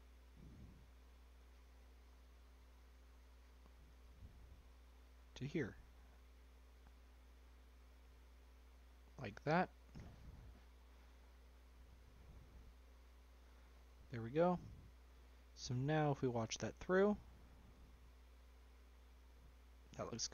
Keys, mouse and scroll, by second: 2.8-5.6 drag, 8.0-9.9 middle drag, 9.9 click, 11.3 click, 13.0 click, 13.3 click, 14.6 scroll down 1, 14.7-16.3 middle drag, 16.3-20.0 drag.